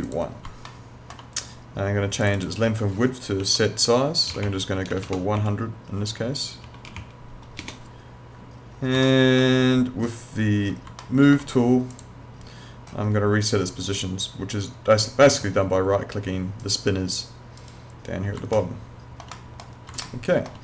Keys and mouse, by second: 0.7 alt+middle click, 2.2 click, 3.4-5.4 typing, 6.0 Tab, 6.6 1, 6.8 0, 9.0 alt+middle click, 11.0 alt+middle click, 11.9 click, 16.6 right click, 18.6 alt+middle click, 20.0 alt+middle click.